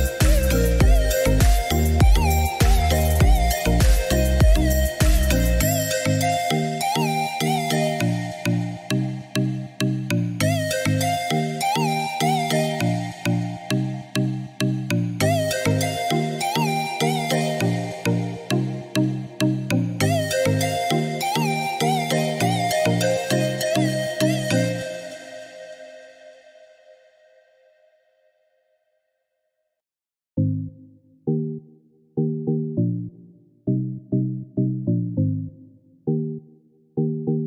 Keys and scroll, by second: 2.3 Delete, 12.8 7, 13.0 Return, 18.9 1, 19.8 6, 20.3 7, 20.8 Return, 24.6 Escape, 35.6 3, 35.9 0, 36.3 Return.